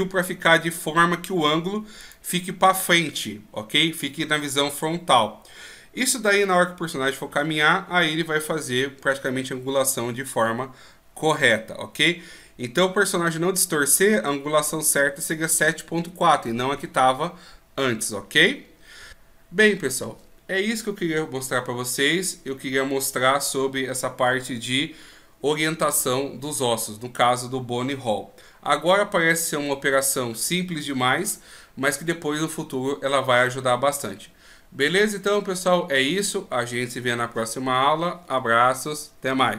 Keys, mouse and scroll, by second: 2.0 right click, 19.1 ctrl+z.